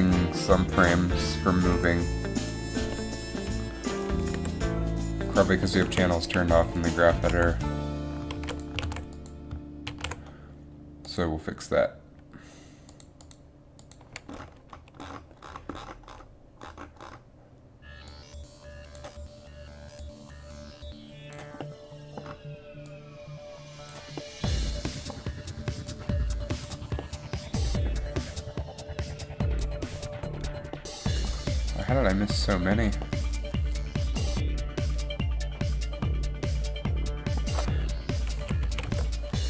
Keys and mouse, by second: 4.5 g, 6.9 a, 8.6 alt+a, 8.9 alt+a, 9.6 alt+a, 10.1 alt+a.